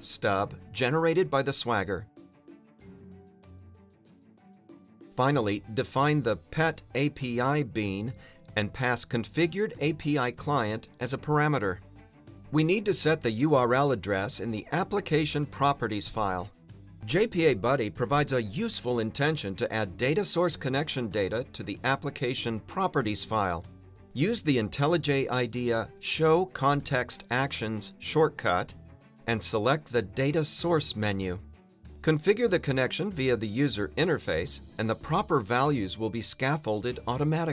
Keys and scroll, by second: 0.8 Return, 3.0 Return, 24.0 alt+Return, 33.5 super+a.